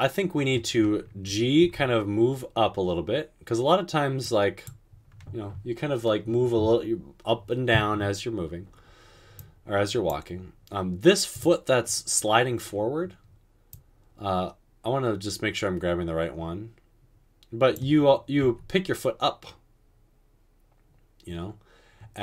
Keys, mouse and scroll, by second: 1.8 g, 18.6 g.